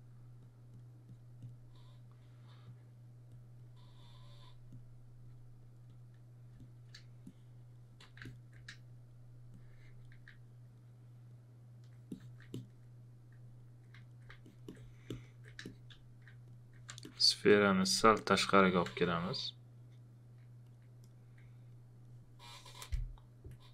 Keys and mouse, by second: 6.5 space, 8.0 click, 13.4 alt+click, 14.0 alt+click, 14.4 alt+click, 15.1 alt+click, 16.9 w, 17.0 click, 18.8 w, 19.8 alt+click.